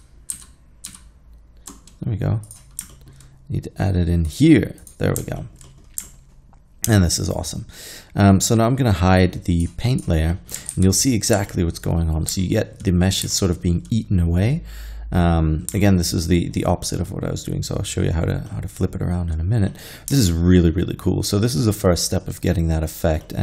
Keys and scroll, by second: 0.4 ctrl+z, 0.9 ctrl+z, 10.8 alt+a.